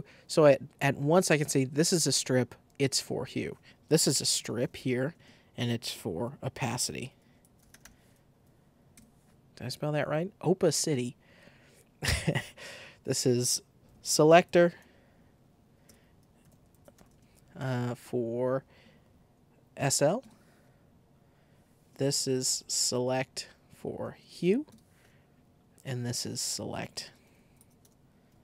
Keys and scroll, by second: 3.7-8.2 typing, 8.9 Return, 13.6-17.4 typing, 19.5-20.4 typing, 21.1 Return, 21.8-24.8 typing, 26.5-28.4 typing.